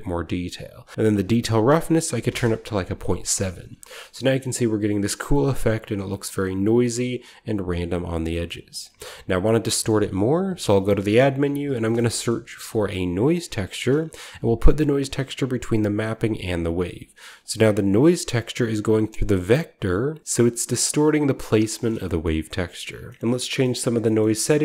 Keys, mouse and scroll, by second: 0.9 click, 1.8-2.7 typing, 2.1 click, 3.3-4.3 scroll down 1, 3.7-6.4 shift+middle drag, 4.3-6.4 shift+scroll up 1, 7.8-9.6 scroll down 1, 8.2-9.6 middle drag, 8.6-9.6 drag, 10.2-11.8 typing, 10.7-12.0 drag, 13.7 Return, 16.0 click, 16.4 click, 17.3 drag, 17.8 click, 18.5 middle click, 18.5 right click, 20.9 click, 21.6 scroll down 1, 21.9 shift+middle click, 22.1 shift+click, 22.1-23.0 shift+scroll down 1, 23.0 shift+scroll down 1, 23.1 middle click, 23.5 middle click, 24.1 middle click, 24.1-24.6 scroll up 1.